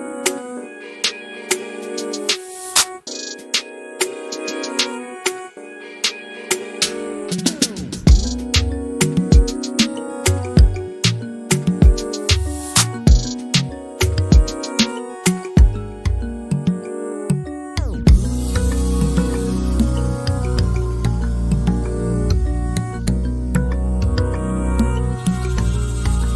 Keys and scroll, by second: 25.1 m.